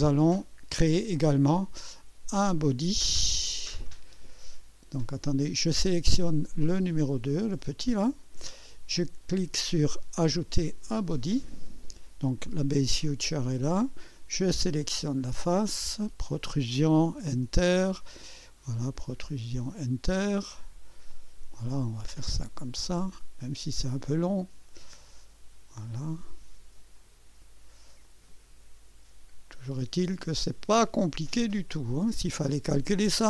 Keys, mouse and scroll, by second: 3.0-4.3 drag, 5.1 click, 6.4 click, 10.7 click, 13.2 click, 14.4 click, 15.8 click, 17.1 Return, 18.5 click, 19.7 click, 20.4 Return, 21.1 click, 22.3 click, 22.9 Return, 23.9 click, 25.1 click, 26.0 Return, 26.3-26.8 drag, 27.0 click, 28.0 click, 28.9 Return, 30.0 click, 31.2 click, 31.9 Return, 32.2-32.8 drag, 33.1 click.